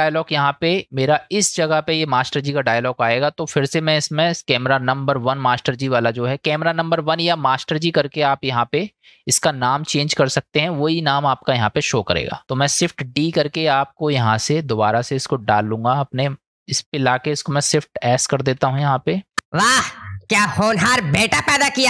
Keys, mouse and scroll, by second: 0.8-2.2 drag, 4.4 click, 12.7 shift+d, 15.5 click, 16.3 middle click, 16.4 click, 16.4 space, 18.6 shift+s, 19.4 space.